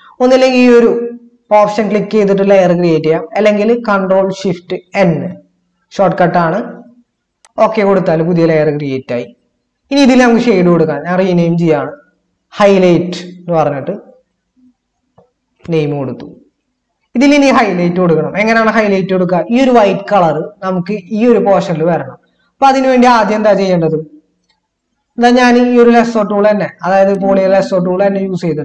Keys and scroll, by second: 4.8 ctrl+shift+n, 11.8 BackSpace, 13.0-15.9 typing.